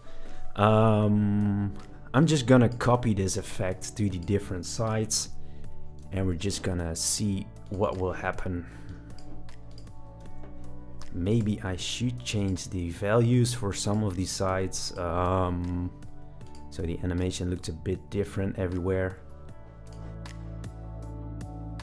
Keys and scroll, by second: 6.0 super+c, 10.2 super+v.